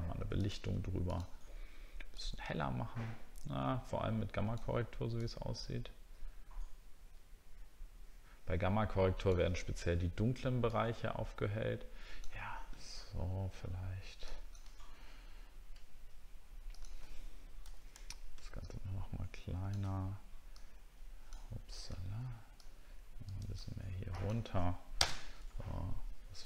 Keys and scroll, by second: 14.8-15.1 alt+scroll down 1.